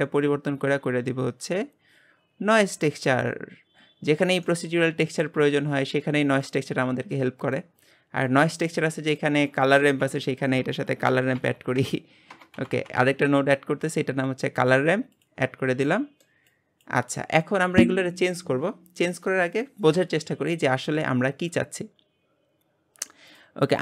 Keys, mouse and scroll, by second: 4.0-4.5 scroll up 1, 4.5-7.6 shift+middle drag, 7.6-8.7 drag, 16.8 click.